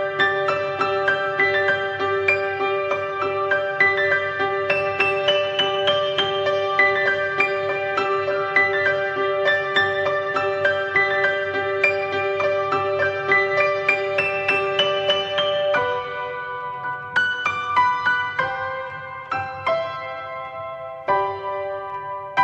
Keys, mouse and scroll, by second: 0.8 middle drag, 1.0-1.4 scroll up 2, 1.4-4.0 middle drag, 4.0 click, 10.8 scroll down 4, 11.1-11.9 middle drag, 11.9 click, 13.8 drag, 14.0 drag, 14.5-15.6 alt+middle drag, 15.6 shift+d, 17.3-20.1 middle drag, 20.1 h, 20.9 middle click, 21.0 scroll up 1, 21.5-22.1 shift+middle drag, 22.1 click.